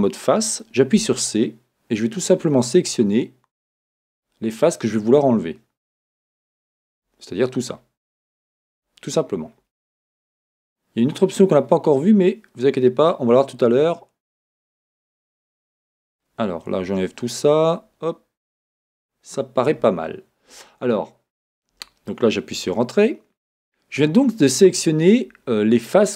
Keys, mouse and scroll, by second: 1.0 c, 22.6 Return.